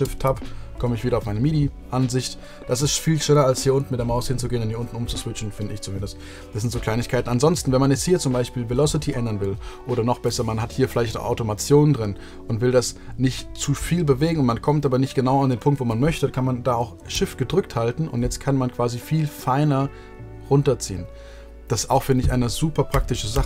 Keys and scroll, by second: 0.2 shift+Tab, 10.1 a.